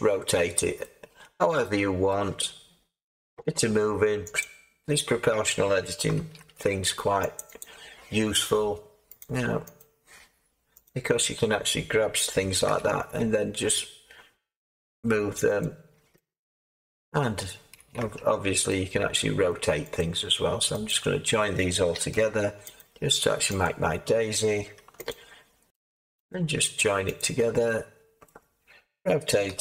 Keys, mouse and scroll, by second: 6.1 ctrl+r, 12.6 g, 18.0 Tab, 29.4 Tab, 29.4 r.